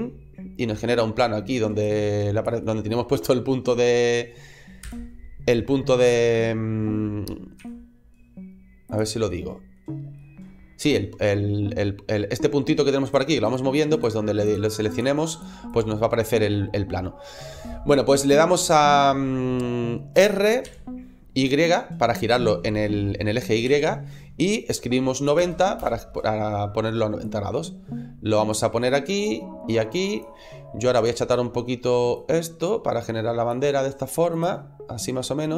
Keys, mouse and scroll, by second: 0.3-0.7 scroll down 3, 1.7 click, 2.5 middle click, 4.7 KP_7, 5.8-6.3 scroll up 2, 7.4 g, 8.8 click, 9.2 middle click, 10.0 middle click, 10.7-11.8 scroll down 3, 12.9 click, 13.3 click, 14.3 click, 14.7 click, 15.5 click, 16.0 scroll up 1, 22.3 r, 25.1 7, 25.1 KP_7, 25.2 KP_0, 25.7 KP_Enter, 27.1 click, 29.1 click, 32.3 click.